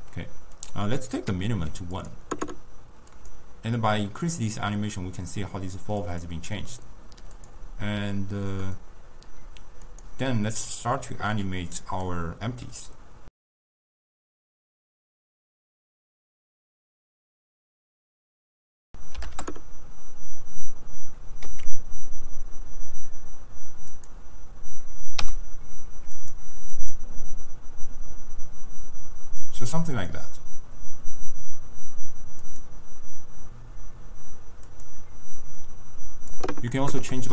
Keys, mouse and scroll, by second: 0.6-2.1 drag, 3.2 click, 9.9-13.3 drag, 13.3-15.3 typing, 13.9 click, 14.7-15.3 drag, 15.6 ctrl+e, 15.8-16.8 drag, 17.0 click, 17.4 click, 18.0 click, 18.1 s, 18.8-21.5 drag, 21.5 s, 25.2 i, 26.2-37.3 drag.